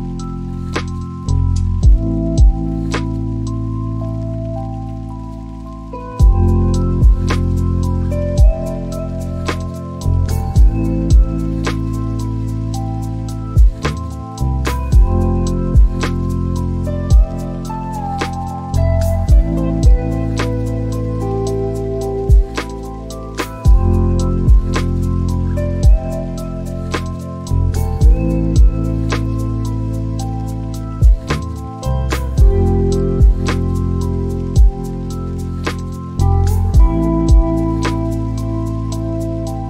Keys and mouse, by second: 4.2 click, 12.1 click, 14.6 click, 20.1 click, 20.7 shift+middle click, 22.7 click, 35.3-37.7 drag, 39.0 click.